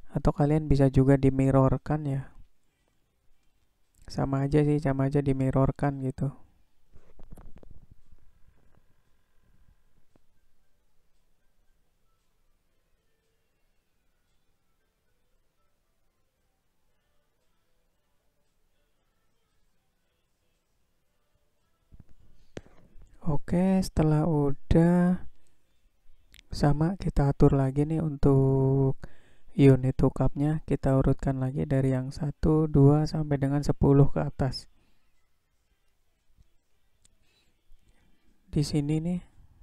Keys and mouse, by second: 1.1 click, 2.3-4.1 drag, 5.6 drag, 6.3-8.0 drag, 8.8 click, 10.0-11.6 drag, 12.3 click, 13.2-14.7 drag, 15.3 click, 16.2-17.9 drag, 18.5 click, 19.3-21.6 drag, 22.6-23.5 middle drag, 27.0 click.